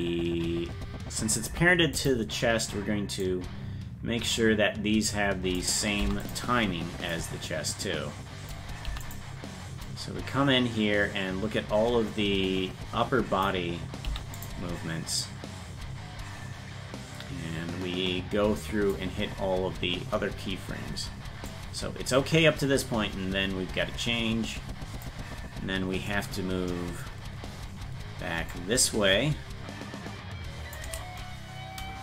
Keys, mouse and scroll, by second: 3.2-5.6 drag, 6.0 i, 7.1-8.5 drag, 8.8 i, 9.9-13.4 drag, 14.0 i, 15.2-18.9 drag, 21.5-25.0 drag, 28.5-30.7 shift+drag.